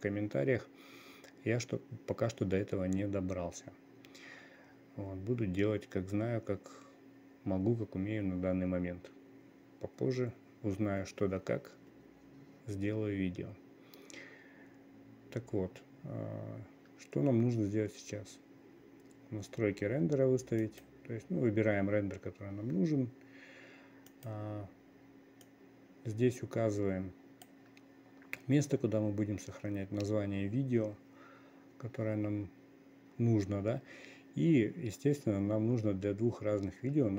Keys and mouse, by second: 21.1 click, 24.6 click, 25.9-28.1 drag.